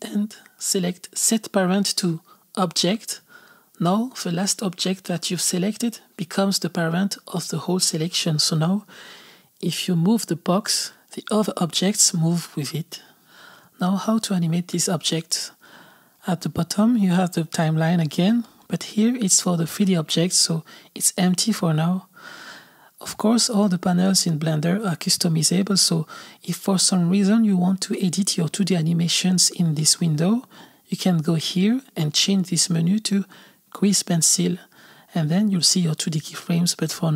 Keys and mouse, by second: 0.0 ctrl+p, 0.0 n, 3.5 ctrl+p, 4.5 click, 6.4 click, 7.5 g, 9.8 r, 13.0 click, 16.7-20.8 drag, 24.9-30.1 drag, 31.3-36.3 drag.